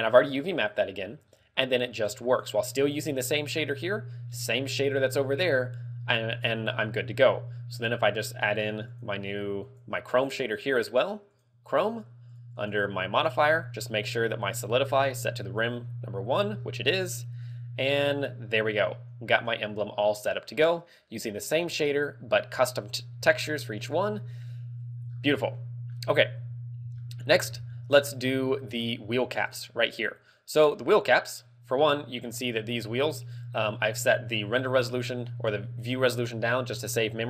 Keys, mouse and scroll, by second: 1.3 scroll up 3, 2.2 click, 3.9-4.7 scroll down 9, 6.5-6.9 scroll up 4, 9.0 click, 9.7 click, 10.0 click, 10.5 click, 11.9 click, 12.6 click, 12.8 click, 13.5-13.8 scroll down 5, 15.8 middle click, 16.7 scroll up 4, 17.4 scroll down 2, 23.1 right click, 23.3 ctrl+w, 25.1 scroll down 6, 25.6 middle click, 26.4 KP_3, 26.6 scroll down 1, 27.1 shift+middle click, 27.6 scroll up 5, 28.1 middle click, 28.6 scroll down 6, 29.9 right click, 30.3 scroll down 1, 32.8 right click, 33.2 scroll up 5, 36.0 click, 36.7 click.